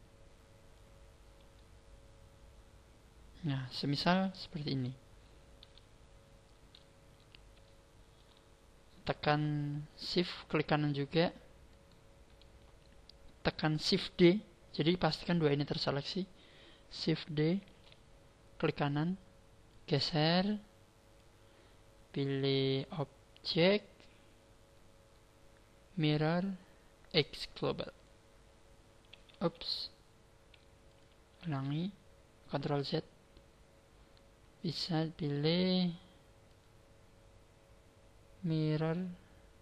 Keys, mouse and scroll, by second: 1.5 middle click, 5.6 KP_1, 7.6 shift+middle click, 11.7 shift+right click, 17.6 shift+d, 18.7 right click, 19.7 click, 22.8 click, 31.5 ctrl+z, 36.4 click.